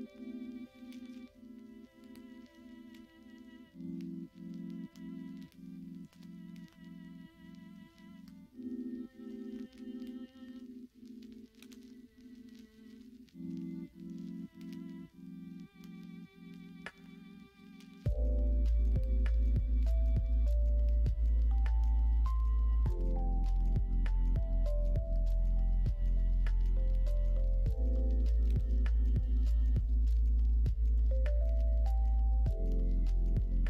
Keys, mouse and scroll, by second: 1.4 shift+click, 2.1 shift+click, 2.7 click, 3.3 shift+click, 4.4 m, 7.5 click, 8.1 shift+click, 9.1 shift+click, 9.8 m, 12.1 m, 14.1 click, 15.0 click, 15.9 shift+click, 16.7 m, 18.0 middle click, 19.0 middle click, 19.6 middle click, 20.0 shift+middle click, 21.1 click, 21.6 shift+click, 22.4 m, 24.0 click, 24.3 shift+click, 25.0 m, 27.1 shift+click, 27.3 middle click, 29.3 m, 30.5 click, 31.5 click, 31.9 click, 32.6 shift+click, 33.3 m.